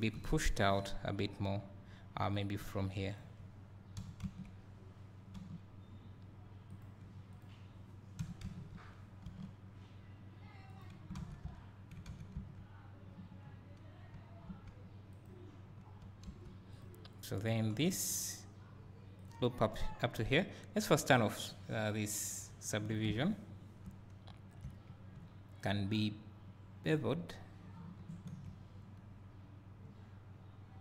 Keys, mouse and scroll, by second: 0.1 KP_1, 0.2 right click, 2.3 click, 4.1 g, 6.8 click, 8.3 g, 11.1 alt+a, 12.5 Tab, 16.4 2, 16.8 click, 18.5 scroll down 1, 21.3 click, 23.5 scroll up 1, 27.8 ctrl+b.